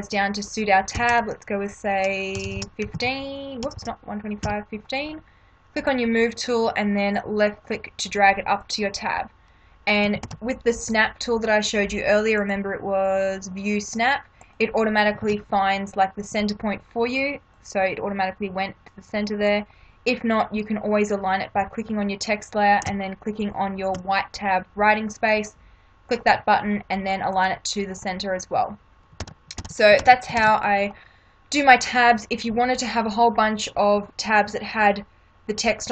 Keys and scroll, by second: 0.9 2, 2.3-4.4 typing, 10.2 ctrl+=, 15.2 ctrl+=, 29.2 ctrl+-.